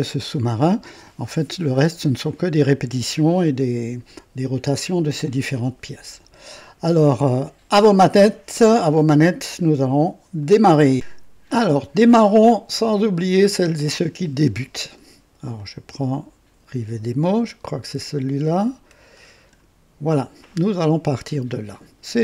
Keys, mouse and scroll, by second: 10.4 right click, 12.8 click, 15.5-19.1 drag, 19.3 click.